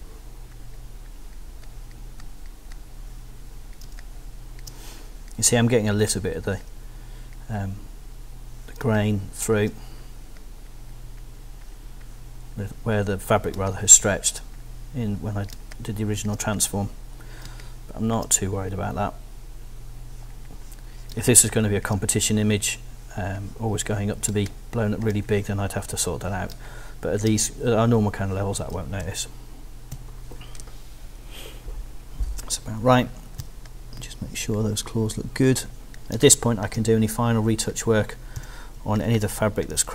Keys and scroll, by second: 3.8 space, 8.8 space, 13.5 space, 15.5 space, 17.5 space, 21.1 space, 24.3 space, 26.5 space, 29.0 super+0, 29.9 super+-, 33.4 z, 36.1 space, 38.4 s.